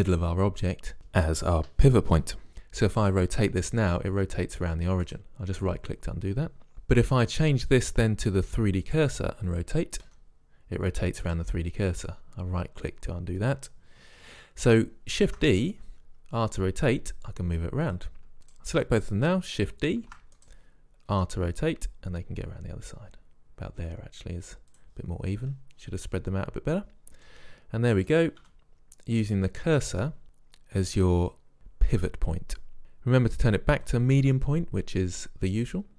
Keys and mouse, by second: 3.6 r, 7.8-9.8 drag, 10.2 r, 15.4 shift+d, 15.9 r, 18.5 click, 19.1 click, 20.1 shift+d, 21.3 r, 27.4 middle drag, 27.5-28.6 middle drag, 28.6 z, 29.3-30.2 middle drag, 30.2-30.8 drag.